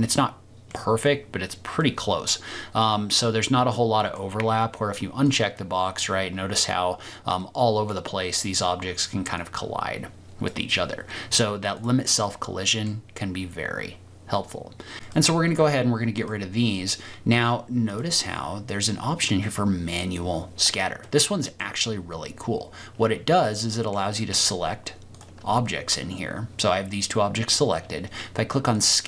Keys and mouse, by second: 0.0 middle click, 0.2 click, 0.6 middle click, 1.8 click, 2.0-4.1 middle drag, 5.2 click, 7.4 click, 7.5 middle click, 9.5 click, 11.7 click, 12.2-12.8 middle drag, 14.9 ctrl+z, 15.5 click, 16.1 click, 17.9 click, 21.0 click, 23.6 click.